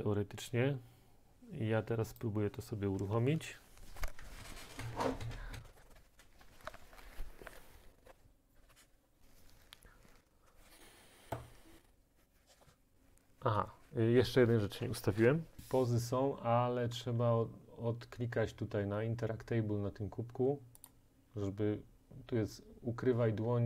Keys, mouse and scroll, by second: 2.2-5.9 drag, 8.5-10.3 drag, 15.6-20.5 drag, 21.0-23.6 drag.